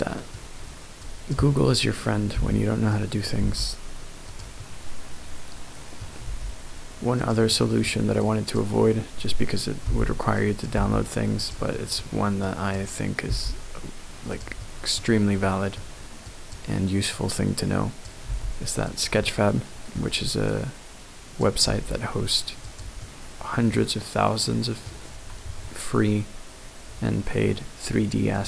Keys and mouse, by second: 1.0 click, 2.3 b, 3.4 g, 4.3 click, 4.6-5.6 middle drag, 5.6 click, 5.7 middle click, 5.8 click, 5.9 middle click, 6.2 g, 7.2 click, 7.5 middle click, 8.2 click, 9.8 b, 10.7 g, 11.4 click, 11.7 middle click, 12.4 click, 13.3 g, 14.3 click, 14.6 middle click, 15.4 middle click, 16.3 click, 17.2 click, 18.2 g, 18.8 click, 19.2 middle click, 20.5 click, 21.6 g, 22.6 click, 23.0 middle click, 24.1 middle click, 25.5 Tab.